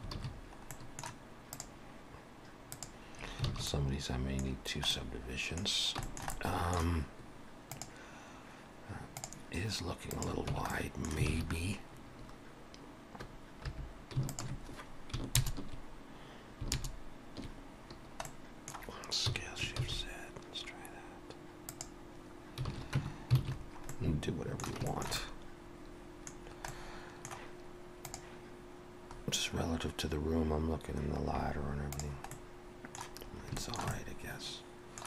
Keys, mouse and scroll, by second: 0.2 alt+a, 0.3-0.8 scroll down 3, 0.7 middle click, 1.6 click, 3.2 click, 3.2-3.5 scroll up 3, 3.5 alt+a, 3.6 middle click, 4.6-5.1 scroll down 2, 4.9 middle click, 5.7 scroll down 2, 6.0 shift+middle click, 6.3 middle click, 10.1 click, 10.5 Tab, 10.7 middle click, 11.3 alt+a, 11.4 scroll up 1, 13.7-14.2 scroll up 1, 13.7 3, 14.3 alt+shift+click, 15.4 ctrl+KP_Add, 17.3 ctrl+KP_Add, 18.0 scroll down 1, 18.3 middle click, 19.3 s, 22.7 alt+a, 23.0 Tab, 23.4 alt+a, 23.6 scroll down 2, 23.9 middle click, 24.9 shift+middle click, 25.2 middle click, 26.4 scroll down 2, 26.7 middle click, 32.3 middle click, 33.3 scroll up 2, 33.6 shift+middle click, 33.9 middle click.